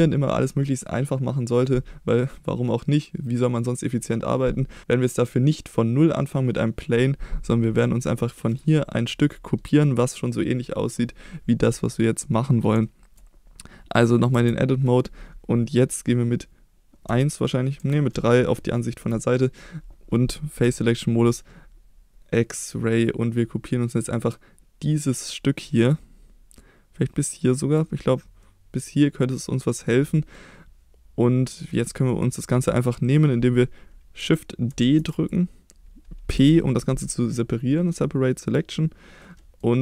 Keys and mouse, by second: 8.5 click, 12.3 middle click, 12.8-13.2 shift+middle drag, 14.3 Tab, 17.1 KP_1, 17.8 KP_3, 18.8 shift+middle click, 20.6 3, 21.2 click, 22.5-25.9 drag, 26.6-27.8 drag, 28.4-29.9 middle drag, 30.3-31.7 middle drag, 34.7 shift+d, 35.1 click, 36.4 p, 39.2 middle click.